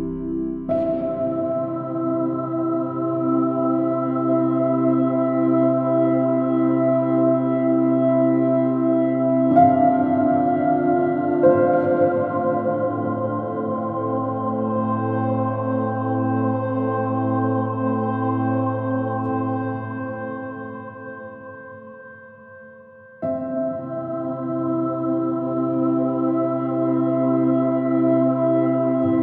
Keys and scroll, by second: 4.4 Left, 5.7 Down, 7.6 Right, 8.9 Down, 9.1 Up, 9.5 Return, 11.5 super+Left, 11.7 super+Up, 12.0 super+Left, 12.2 super+Up, 13.3 super+Up, 13.4 super+Right, 15.9 super+Right, 16.4 super+Up, 16.5 super+Right, 16.7 super+Down, 17.0 super+Left, 26.2 b, 26.6 x.